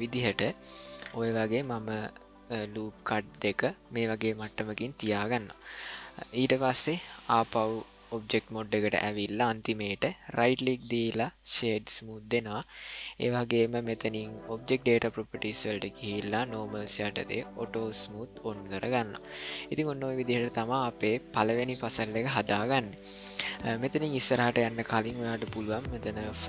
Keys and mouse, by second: 0.6 ctrl+middle click, 1.4 s, 4.4 ctrl+middle click, 5.3 shift+middle click, 7.4 click, 9.4-10.0 middle drag, 10.4-11.7 right drag, 16.4 click, 17.6 click, 18.9-19.7 middle drag, 20.0 shift+middle drag, 20.8 ctrl+middle click, 22.2 middle click, 23.0 shift+middle click.